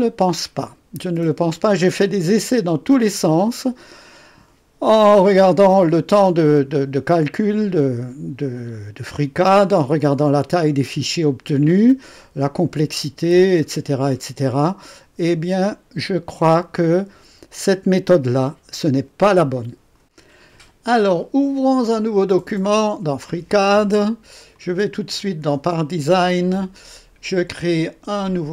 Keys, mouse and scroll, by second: 1.1-1.5 scroll down 1, 2.2 right click, 20.0 click, 22.1 click, 24.5 click.